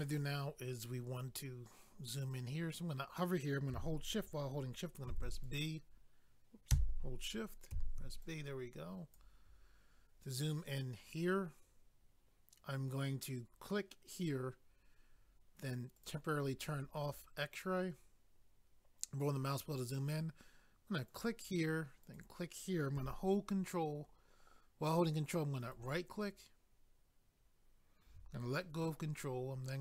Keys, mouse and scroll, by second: 5.5 click, 5.5 b, 8.2 click, 8.2 b, 14.1 click, 14.2 click, 16.0 click, 16.1 click, 16.8 scroll up 1, 21.1 click, 22.0 click, 25.6 ctrl+right click.